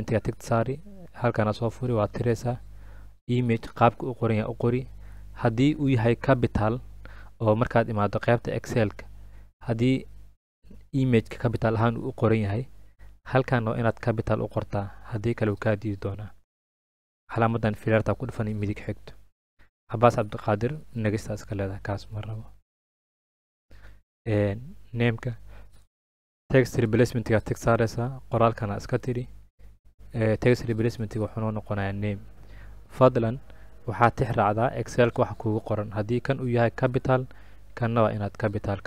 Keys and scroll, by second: 2.2 BackSpace, 3.9 typing, 29.0 BackSpace, 30.8-32.0 typing.